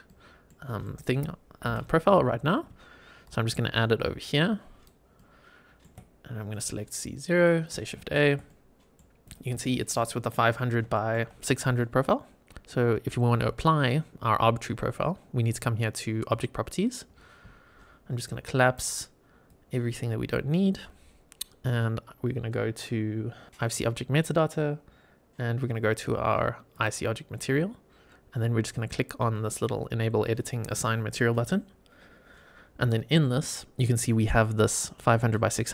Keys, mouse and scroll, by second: 0.0-0.4 middle drag, 0.7 shift+middle click, 1.6 KP_7, 2.3 scroll up 2, 3.2 shift+right click, 5.1-5.8 shift+middle drag, 6.4-7.3 drag, 7.9 shift+a, 8.4-8.9 middle drag, 9.2 click, 9.6 shift+middle drag, 10.0 middle drag, 10.8 shift+middle click, 16.3 click, 17.0-18.7 scroll up 6, 18.1-18.7 drag, 19.4-20.2 drag, 26.6 click, 27.4-29.7 scroll down 3, 31.2 click, 32.2 scroll down 2.